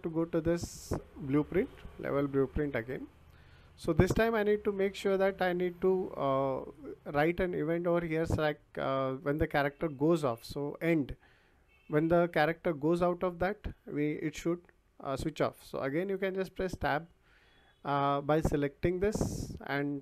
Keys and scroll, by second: 16.7 Tab.